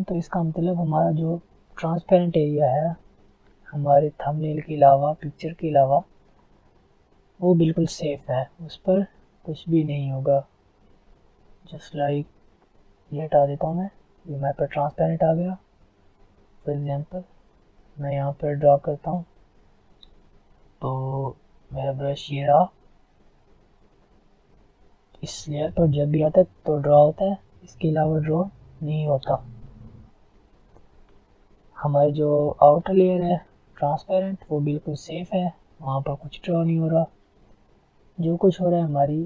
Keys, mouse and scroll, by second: 0.8 click, 2.3 click, 2.3-2.6 alt+scroll down 2, 2.9 alt+scroll up 1, 4.1 click, 6.4 alt+scroll down 1, 6.6 scroll up 2, 9.6 click, 12.1 click, 14.8 click, 14.8 alt+scroll down 1, 15.0 alt+scroll up 1, 15.5 alt+scroll up 1, 16.0 click, 16.6 alt+scroll down 1, 16.8 alt+scroll up 1, 17.2-18.8 alt+right drag, 18.8 click, 21.5 alt+right click, 23.0 click, 29.3 F10, 31.1 ctrl+z, 31.8-32.2 scroll down 1, 32.4-32.8 alt+scroll down 1, 35.0 alt+scroll up 1, 35.2 alt+right click, 35.8-36.2 alt+scroll down 2, 36.2 click, 37.1 ctrl+z, 37.7 click, 38.6 ctrl+z.